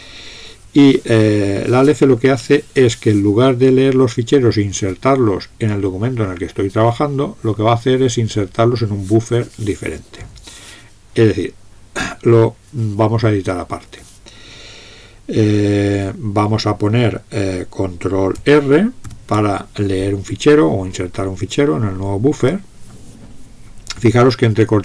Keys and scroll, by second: 19.0 ctrl+r.